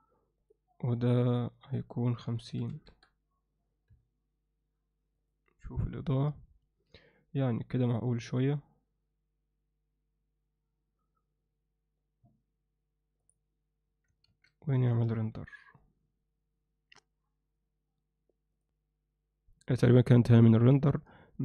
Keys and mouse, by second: 0.4 click, 0.8 click, 1.9-3.0 drag, 3.9 KP_0, 14.3 ctrl+s, 16.2 F12.